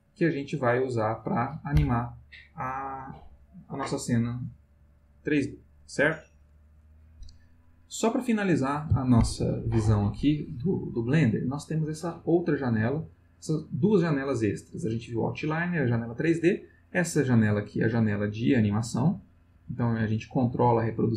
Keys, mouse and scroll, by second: 17.3-19.8 drag.